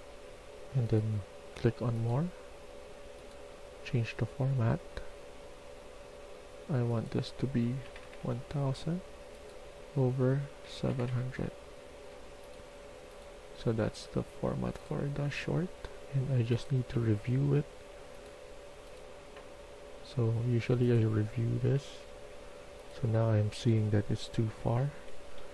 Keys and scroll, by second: 7.7 0, 7.9 0, 10.5 typing, 24.4-25.3 typing.